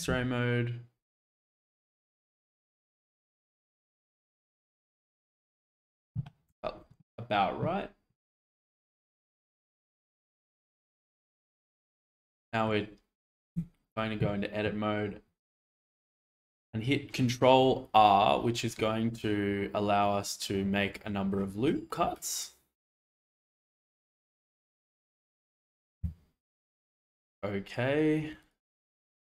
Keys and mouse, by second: 5.6 click, 6.5 Tab, 10.4-11.2 middle drag, 11.7 shift+middle click, 12.2-12.7 middle drag, 13.5 Tab, 15.9 ctrl+r, 26.1 Escape.